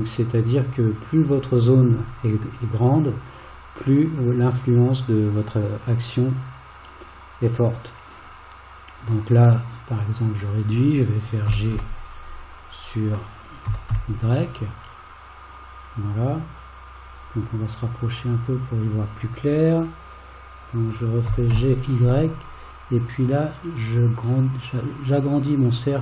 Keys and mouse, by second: 21.3 g.